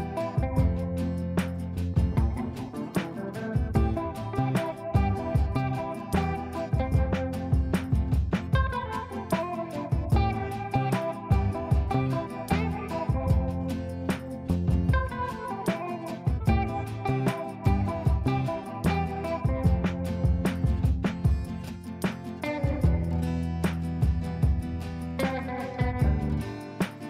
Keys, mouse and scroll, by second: 7.4 right click, 8.0-11.8 drag, 11.8 shift+click, 12.7-17.9 drag, 19.3 click, 20.9 right click, 21.3 click, 25.0 right click, 25.6 click, 26.7 shift+Page_Up.